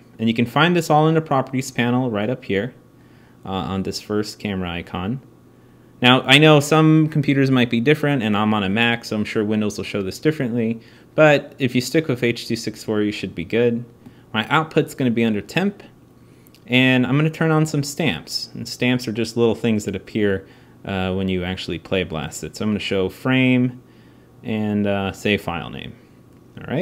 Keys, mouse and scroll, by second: 17.7-22.3 drag.